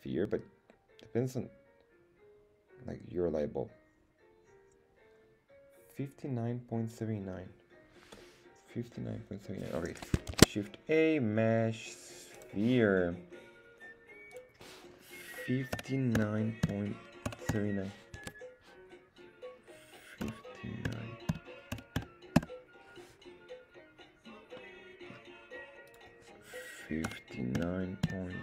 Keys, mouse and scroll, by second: 10.3 shift+a, 14.3-22.9 drag, 24.6-25.1 middle drag, 25.9-28.4 drag.